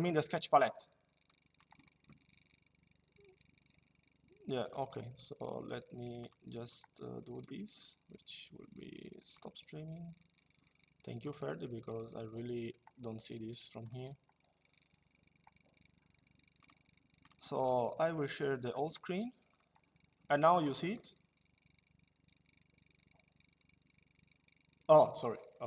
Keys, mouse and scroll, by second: 1.0 click, 5.9 click, 9.1 click, 11.0 click, 13.6 click, 16.3 click, 18.4 click, 20.6 click.